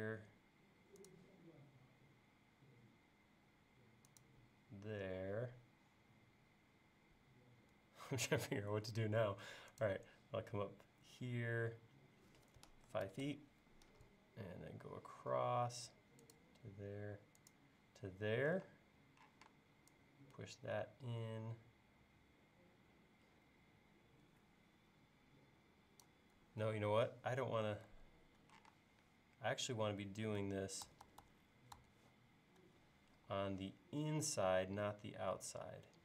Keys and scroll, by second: 5.1 l, 12.6-13.9 typing, 18.6-19.3 typing, 26.6 e, 27.9 super+z, 30.9 super+z, 33.2 l.